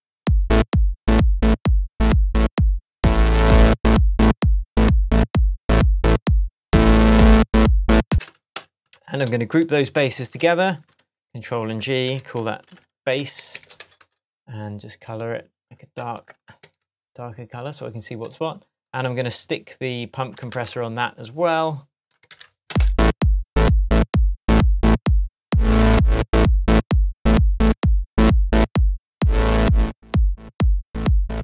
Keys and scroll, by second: 0.2 space, 8.1 space, 10.9 shift+super+g, 12.0 super+r, 12.6 shift+super+b, 12.9-13.8 typing, 14.7 Return, 16.6 super+s, 20.5 super+c, 22.2 super+v, 22.6 super+space, 23.4 space.